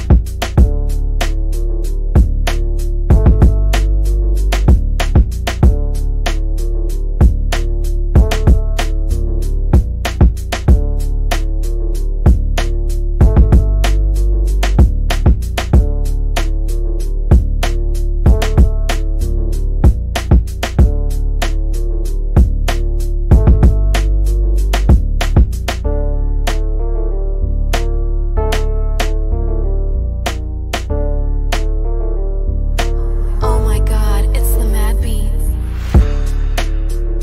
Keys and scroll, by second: 8.4 c, 12.0 Down, 17.7 Escape, 19.4 Delete, 24.9 c.